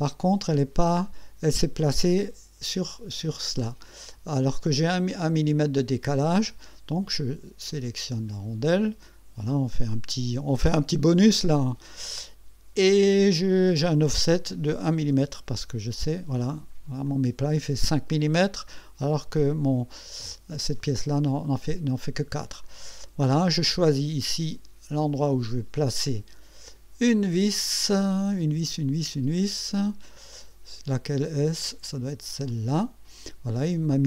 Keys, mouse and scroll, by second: 7.7 click, 8.1 scroll down 1, 11.3-11.9 drag, 14.1 click, 15.2 KP_1, 15.7 KP_Enter, 17.1-19.4 drag, 22.6-23.3 drag, 23.4 click, 25.0 click, 32.5 click, 33.0 click, 33.6-34.0 drag.